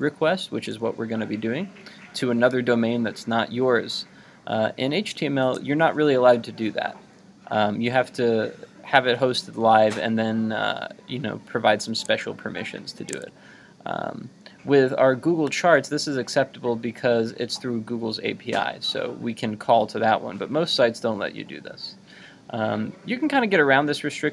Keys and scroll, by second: 12.0 super+Tab.